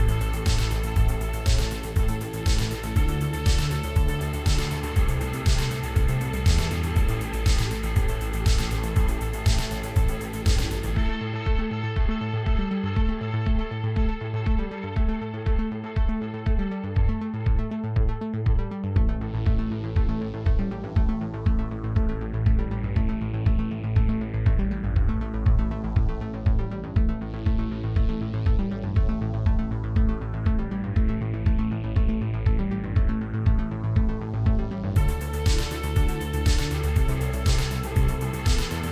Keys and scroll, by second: 2.7 ., 5.1 i, 6.8 e, 8.4 i, 9.7 i, 11.3 i, 14.0 i, 19.1 i, 23.1 shift+z, 24.5 g, 26.5 shift+z, 29.0 Tab, 34.0 3.